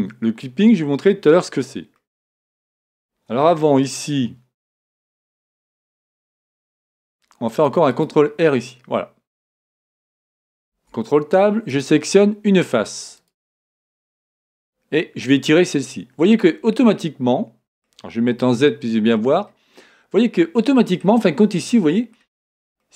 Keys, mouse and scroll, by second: 1.9-3.8 middle drag, 3.4 Tab, 4.0-4.5 scroll up 1, 4.5-6.0 middle drag, 5.7 ctrl+r, 8.0-9.7 drag, 8.5-10.5 middle drag, 10.6 ctrl+Tab, 13.1-14.9 drag, 13.6-15.5 right drag, 15.2-17.0 drag, 16.8-18.7 middle drag, 18.3 z, 19.8-22.9 middle drag.